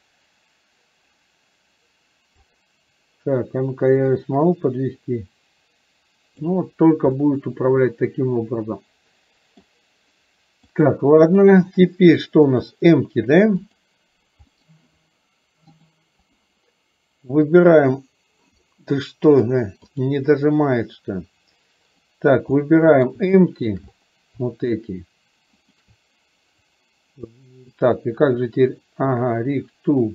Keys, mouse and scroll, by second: 4.3-6.5 drag, 7.3-9.7 middle drag, 11.0 click, 12.7 drag, 13.6 click, 14.6 click, 15.8-16.5 drag, 17.6 drag, 19.5 click, 22.0 click, 22.6-23.2 middle drag, 23.5 shift+middle click, 25.8 shift+click.